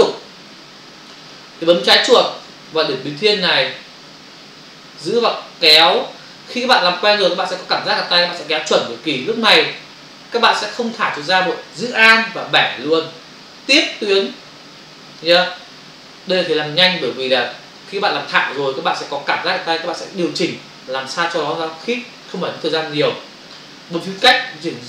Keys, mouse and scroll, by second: 1.1 space, 5.1 click, 24.2 space.